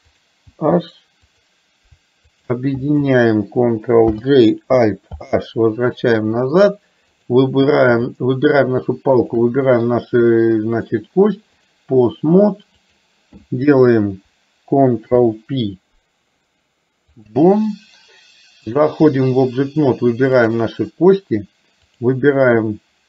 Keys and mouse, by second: 0.2 click, 2.4 click, 4.2 ctrl+j, 5.3 alt+h, 7.3 click, 8.3 shift+middle click, 10.9-11.9 drag, 12.8 click, 15.1 ctrl+p, 18.9 click, 20.4 click, 21.9 click.